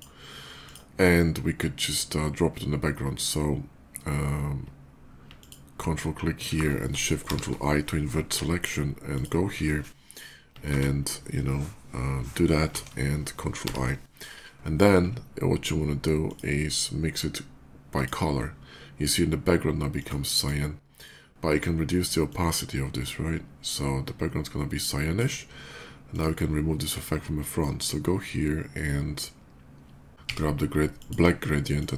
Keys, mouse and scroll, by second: 0.4 click, 5.1 ctrl+click, 8.9 ctrl+shift+click, 10.6 ctrl+Delete, 12.5 ctrl+d, 13.1 ctrl+d, 13.5 ctrl+i, 16.1 click, 17.7 click, 19.7 click, 20.2 click, 22.1-25.0 drag, 25.9 click, 30.1 x, 30.7 click, 31.5 click.